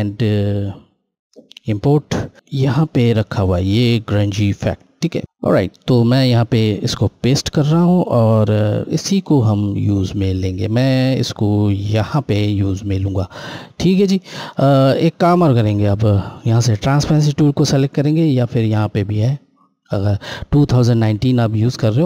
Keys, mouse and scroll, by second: 1.5 click, 6.0 click, 17.6 Left, 17.6 click.